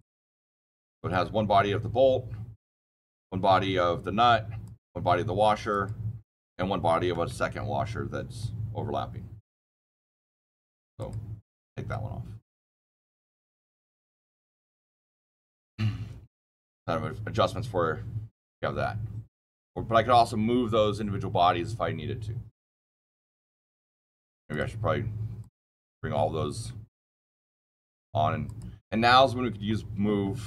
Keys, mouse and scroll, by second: 0.9 click, 2.9 click, 4.6 click, 5.6 click, 7.2-9.5 shift+middle click, 7.6 shift+middle click, 7.7 shift+middle click, 10.4 click, 10.9 click, 11.8-14.7 shift+middle click, 12.2 shift+middle click, 15.1 click, 15.2 click, 15.5-16.2 shift+middle click, 15.9 shift+middle click, 24.4 shift+click, 25.3 shift+click, 26.8 ctrl+shift+click, 27.0 ctrl+click, 27.2 ctrl+shift+click, 28.4-30.4 shift+click, 29.6 shift+middle click, 29.7 shift+middle click, 29.8 shift+middle click, 30.0 shift+middle click, 30.0 shift+middle click.